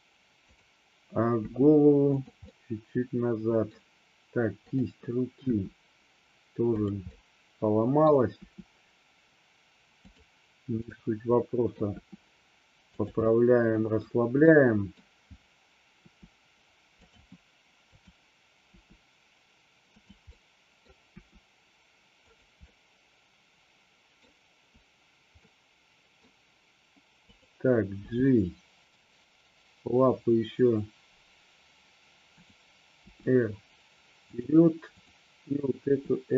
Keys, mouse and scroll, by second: 1.5 r, 2.2 click, 2.6-3.7 middle drag, 4.7 click, 5.6 r, 7.2-8.1 middle drag, 8.5 r, 10.1 click, 11.0 middle click, 12.1 r, 13.0 click, 13.4 middle click, 14.6 middle click, 15.0-15.5 scroll down 1, 16.1 r, 17.1 click, 18.7 r, 20.1 click, 20.5-20.9 middle drag, 22.4 click, 22.7-24.2 middle drag, 25.5-26.4 middle drag, 27.4 click, 28.0 g, 32.5 click, 33.1 r, 34.4 click, 35.1 click.